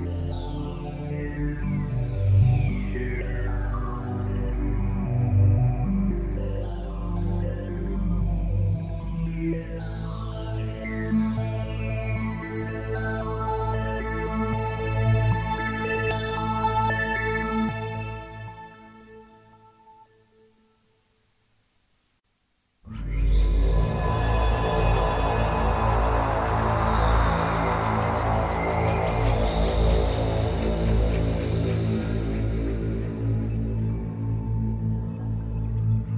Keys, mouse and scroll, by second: 0.3 KP_1, 0.7-1.1 scroll up 3, 2.7 click, 10.0 ctrl+z, 13.3 g, 15.0 click, 16.6 ctrl+z, 18.4 middle click, 24.8 z, 25.6 middle click, 29.4 KP_1, 30.6 click, 35.7 middle click.